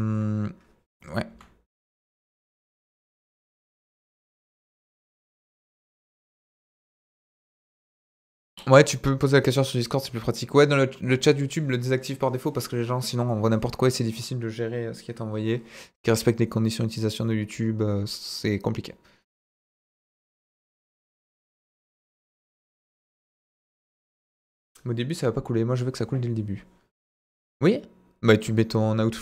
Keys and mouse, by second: 1.3 Delete, 3.1-4.2 middle drag.